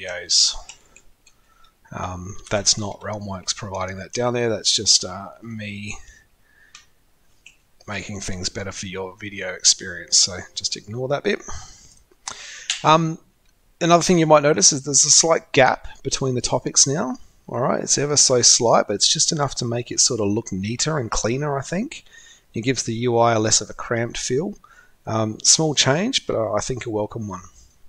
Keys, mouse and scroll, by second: 1.7-2.4 typing, 4.0-4.9 typing, 5.1 shift+Home, 5.1 ctrl+shift+Right, 5.1 ctrl+shift+Right, 5.3 ctrl+shift+Right, 5.5 ctrl+shift+Right, 5.7 ctrl+shift+Right, 5.8 ctrl+shift+Right, 6.3 ctrl+shift+Right, 6.4 ctrl+shift+Right, 6.9 ctrl+shift+Right, 7.6 ctrl+shift+Right, 22.6-27.8 drag.